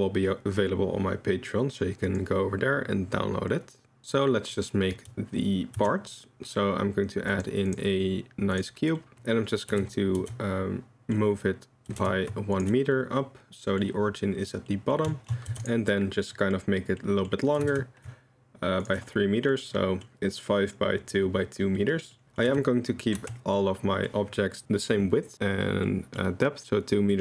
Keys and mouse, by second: 4.4 middle click, 5.8 shift+a, 9.0 middle click, 9.8 Tab, 10.3 3, 11.9 g, 12.9-13.8 drag, 14.7 drag, 15.1 shift+middle drag, 15.5 3, 16.2-16.5 middle drag, 17.0 middle drag, 17.6 g, 19.2-19.5 middle drag, 19.7 middle drag, 21.8-22.1 middle drag, 22.2 middle click, 22.5 a, 23.2 Tab, 23.6-24.1 middle drag, 25.9-26.2 middle drag, 27.1-27.2 middle drag.